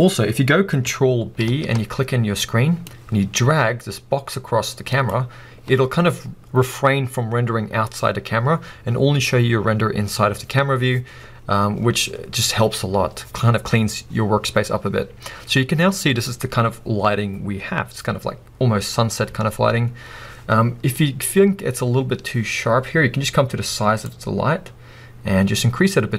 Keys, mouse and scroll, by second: 5.2 ctrl+b, 5.2 middle click, 11.8-24.1 middle drag, 24.1-26.1 drag.